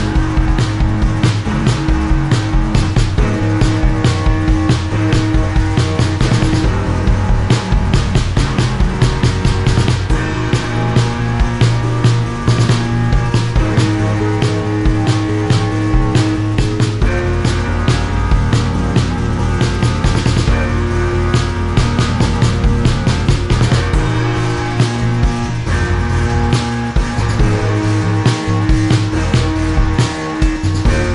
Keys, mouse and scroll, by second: 0.9 shift+click, 1.0 click, 1.5 click, 2.9 click, 4.0 shift+click, 4.5 click, 5.9 click, 6.0 click, 6.8 Delete, 9.1 click, 10.4 click, 13.1 click, 13.4 click, 13.7 click, 14.4 click, 14.9 click, 15.1 shift+click, 16.0 click, 16.6 click, 17.3 click, 18.4 click, 21.8 click, 22.3 shift+click, 23.1 click, 24.2 click, 26.1 click, 27.1 click, 30.3 Delete.